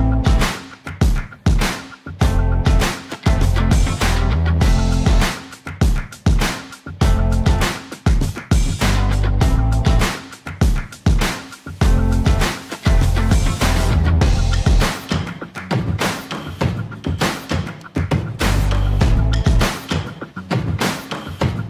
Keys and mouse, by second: 3.6 click, 4.2 shift+middle click, 4.9 e, 5.5 z, 7.2 s, 8.3 click, 8.8 shift+z, 9.2 Tab, 9.5 middle click, 11.5 shift+middle click, 12.1 middle click, 14.3 2, 14.7 click, 15.1 alt+click, 16.1 click, 16.5 shift+z, 17.0 shift+middle click, 18.1 ctrl+b.